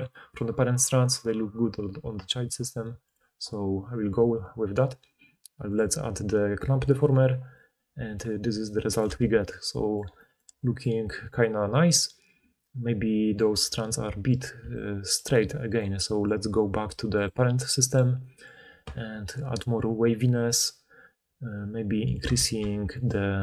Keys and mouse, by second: 3.1-5.7 drag, 9.1 alt+a, 14.5 d, 15.2 d, 15.7 d, 16.1-17.2 middle drag, 22.2 middle click.